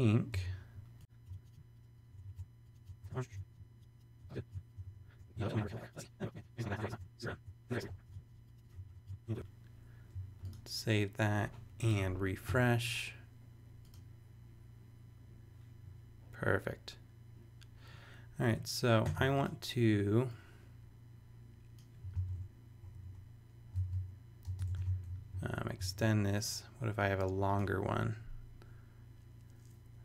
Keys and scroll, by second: 0.3 v, 1.2 alt+t, 2.0 super+Return, 2.3 shift+super+Tab, 2.8 super+v, 2.9 super+Tab, 3.0 super+v, 3.2 alt+t, 4.1 super+Return, 4.3 shift+super+e, 4.5 super+Tab, 4.7 super+v, 4.9 shift+BackSpace, 5.1 super+Tab, 5.5 alt+t, 6.7 shift+super+e, 6.9 super+Tab, 7.4 super+Tab, 7.8 v, 8.0 alt+t, 8.8 shift+super+Return, 8.8 shift+super+e, 9.0 super+Tab, 9.3 super+v, 22.1 super+c, 22.8 super+Right, 23.0 Return, 23.7 super+Return, 24.4 super+space, 24.7 super+v.